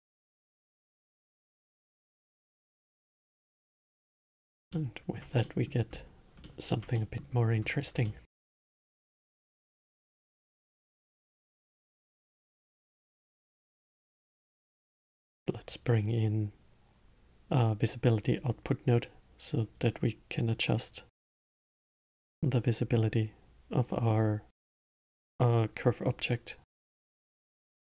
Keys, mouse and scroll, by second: 3.9 drag, 4.5 scroll up 2, 5.1-6.2 alt+middle drag, 6.2 scroll down 2, 6.8-7.9 alt+middle drag, 7.9 scroll up 2, 8.4-9.2 alt+middle drag, 9.2-10.5 scroll down 2, 10.5-12.2 middle drag, 12.2-14.3 scroll down 4, 14.3 middle click, 14.9 shift+a, 20.9-22.9 drag, 23.4-25.6 drag.